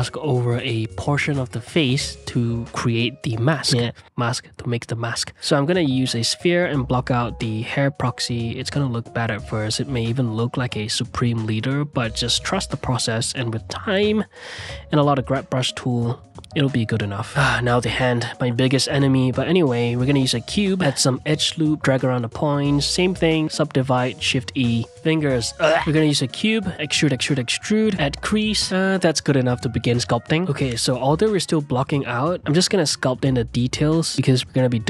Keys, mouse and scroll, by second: 0.6 click, 1.0-1.9 middle drag, 1.9 click, 2.8 f, 2.9 shift+click, 4.7 f, 4.9 click, 6.3 shift+middle click, 6.4 g, 6.8 s, 7.1 click, 7.5 middle click, 8.0 click, 11.5-15.1 typing, 11.6 click, 12.4 middle click, 12.5 click, 13.6 click, 14.6 click, 15.2 click, 15.5 ctrl+z, 15.6 click, 15.9 middle click, 16.3 f, 16.5 click, 17.3 middle click, 17.4 g, 17.9 s, 18.3 g, 19.2 s, 20.2 ctrl+r, 20.3 g, 20.6 g, 21.1 click, 22.3 middle click, 22.4-26.3 typing, 23.0 middle click, 23.5 click, 24.3 middle click, 26.0 ctrl+right click, 26.5 ctrl+right click, 26.9 Tab, 27.2 ctrl+3, 27.6 Tab, 27.7 shift+e, 28.3 s, 28.5 Tab, 28.7 s, 29.1 ctrl+2, 29.2 click, 29.7 shift+r, 30.3 middle click, 30.8-33.0 drag, 33.0 middle click, 33.6 click, 34.5 ctrl+middle click, 34.7 f.